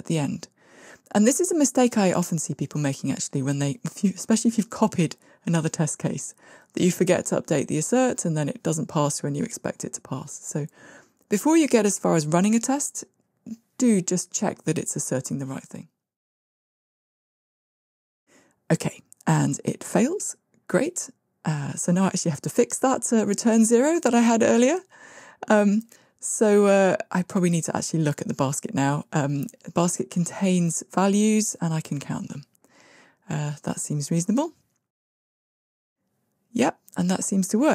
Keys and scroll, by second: 15.3 ctrl+r, 21.1 shift+Escape, 30.2 Tab, 33.5 Tab, 35.1 ctrl+r.